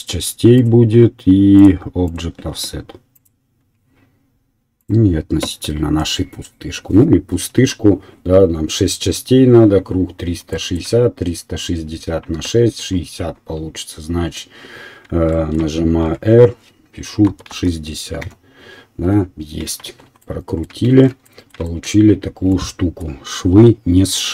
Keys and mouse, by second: 0.9 right click, 1.8 middle click, 2.2-3.3 right drag, 3.3-24.3 middle drag, 16.0 r, 20.9 shift+z.